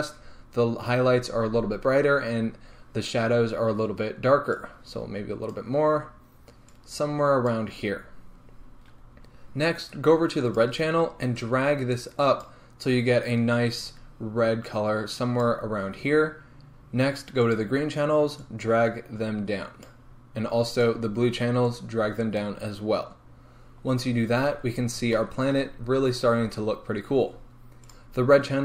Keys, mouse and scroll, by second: 24.3-24.8 scroll down 2, 24.8-25.2 scroll up 1, 25.2-28.4 shift+middle drag, 25.8-26.3 scroll up 2, 26.3-28.4 scroll down 2.